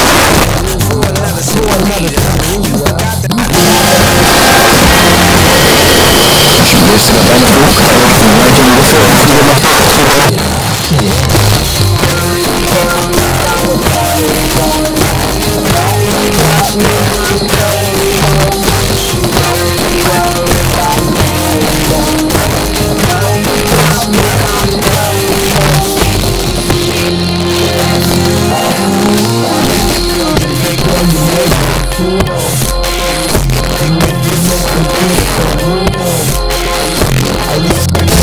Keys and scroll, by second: 9.5 Page_Down.